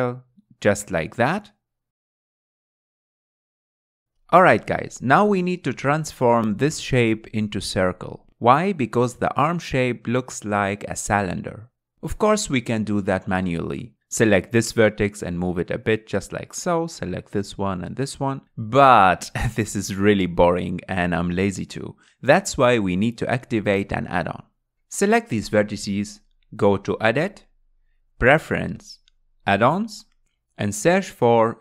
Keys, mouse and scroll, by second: 1.1 g, 2.3 s, 3.9-6.9 middle drag, 7.4-8.4 scroll up 2, 8.4-11.7 middle drag, 14.2 1, 14.5 click, 15.7 g, 18.1 click, 18.5 g, 21.3 ctrl+z, 21.8 ctrl+z, 22.2 ctrl+z, 27.1-31.1 drag.